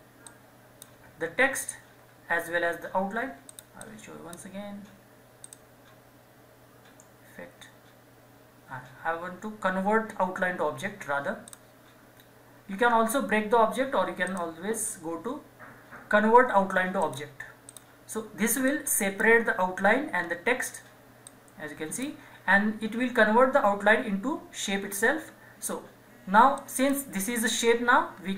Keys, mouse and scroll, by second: 1.7 ctrl+z, 3.5-5.4 drag, 11.4 click, 14.3 click, 17.0-20.2 drag, 20.2 scroll up 1, 21.3-24.6 drag, 25.2-25.7 scroll down 1, 25.7-26.6 scroll up 1, 26.6 click.